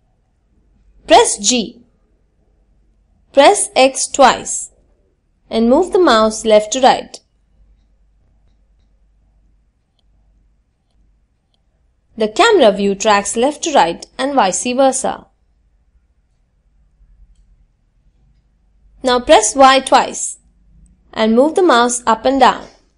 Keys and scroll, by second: 16.4 y.